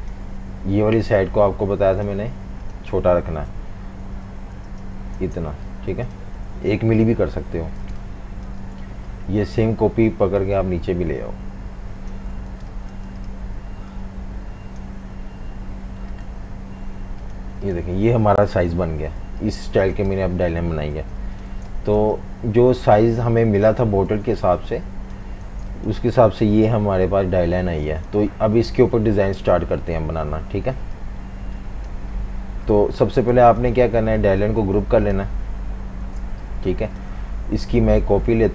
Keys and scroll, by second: 3.5-6.5 typing, 7.1 super+-, 7.3 super+-, 7.9-9.0 typing, 12.5 typing, 18.5 super+-, 18.7 super+-, 20.9 super+g, 21.5-22.4 typing, 24.1 typing, 25.5 v, 25.6 space, 27.7 v, 27.8 space, 30.8 typing, 33.3 v, 36.0 super+g.